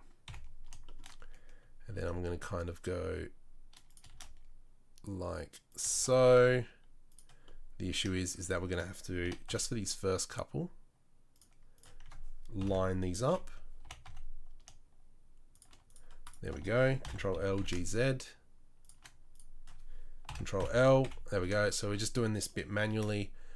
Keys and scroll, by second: 0.2 KP_7, 1.9 shift+d, 4.1 shift+d, 5.9 shift+d, 9.2 g, 12.6 ctrl+l, 13.2 KP_3, 13.8 g, 17.0 ctrl+l, 17.3 g, 20.3 ctrl+l, 20.6 Page_Down, 21.0 KP_7, 22.9 shift+d.